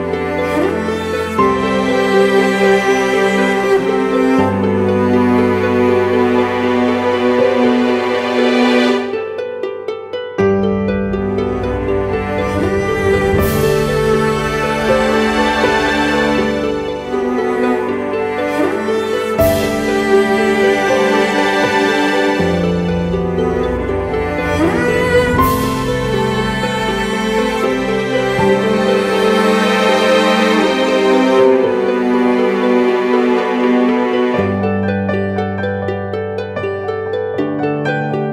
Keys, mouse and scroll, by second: 2.5 double click, 18.5-19.3 typing, 24.0 typing, 35.6 double click, 37.1-38.3 typing.